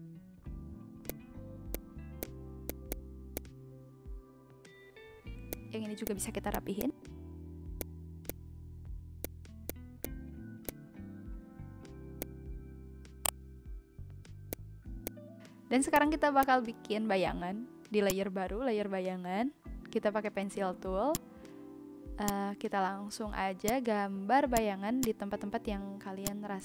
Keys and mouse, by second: 0.0 Delete, 1.0 click, 1.7 click, 2.2 click, 2.6 click, 3.1 Delete, 3.3 click, 5.5 click, 5.8 shift+e, 6.0 click, 6.4 v, 6.5 click, 6.9 Delete, 7.6 shift+e, 7.7 click, 8.2 click, 9.2 click, 9.6 click, 10.2 Delete, 10.6 click, 12.2 click, 13.2 click, 14.5 click, 15.0 click, 15.7 Delete, 15.9 click, 16.4 click, 17.2 n, 18.0 click, 20.8 ctrl+z, 21.1 click, 22.2 click, 23.0 ctrl+z, 23.6 click, 24.5 click, 26.2 click.